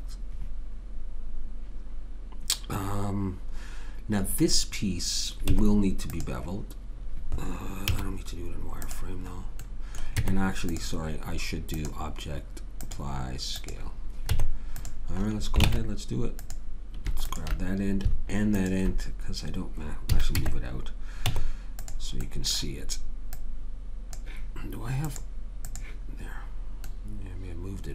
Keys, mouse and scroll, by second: 5.5 Tab, 7.9 z, 10.2 Tab, 14.3 Tab, 15.7 ctrl+Tab, 17.3 click, 20.1 a, 20.3 Tab, 21.2 Tab, 22.2-24.0 middle drag, 24.0-26.7 drag.